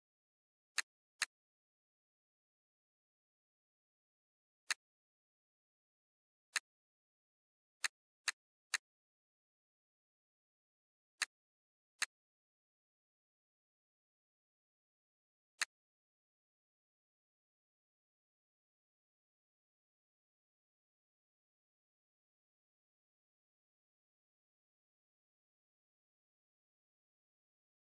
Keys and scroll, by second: 2.2 BackSpace, 3.2 m, 14.9 z.